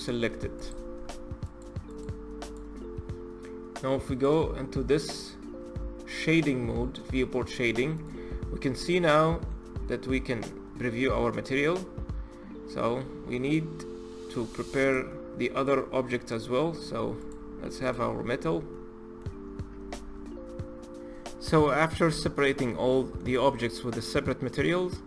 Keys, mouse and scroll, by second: 1.2 click, 2.1 click, 3.9 click, 7.7 click, 8.7-9.5 middle drag, 9.5-10.0 scroll down 2, 10.0-11.0 middle drag, 11.0-11.4 scroll up 3, 11.4-12.7 middle drag, 12.7-13.1 scroll up 3, 13.1 middle click, 13.8-14.3 scroll down 4, 14.5 click, 14.8-16.5 middle drag, 16.5-16.9 scroll up 3, 16.9 click, 17.5 click, 17.9-18.5 scroll down 5, 18.5-19.1 middle drag, 19.1-19.7 scroll up 3, 21.3-21.6 middle drag, 21.6-22.1 scroll down 1, 22.1-24.0 middle drag, 24.0-24.4 scroll up 3, 24.4-25.0 middle drag.